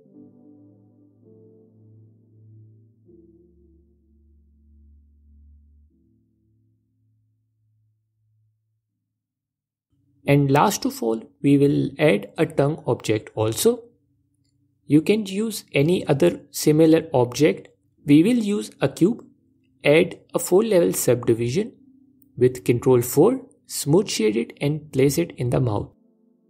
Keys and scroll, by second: 1.0 Tab, 5.6 ctrl+Tab, 5.9 f, 10.8 shift+Tab, 13.0 shift+a, 16.4 s, 17.7 shift+Tab, 19.0 s, 20.6 ctrl+4, 22.8 s.